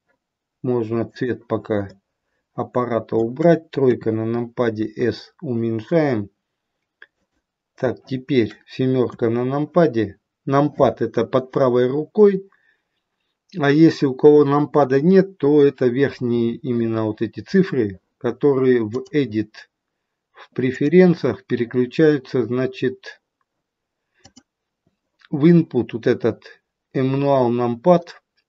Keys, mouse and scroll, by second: 1.9 middle click, 3.7 KP_3, 4.7 s, 18.9 click.